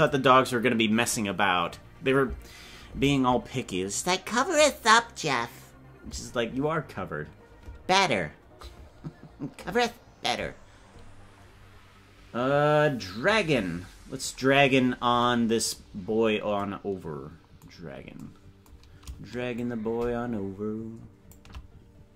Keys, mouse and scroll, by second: 14.5-15.0 scroll down 8, 15.9-16.4 scroll down 3, 17.8 scroll down 1, 19.6-22.0 shift+drag.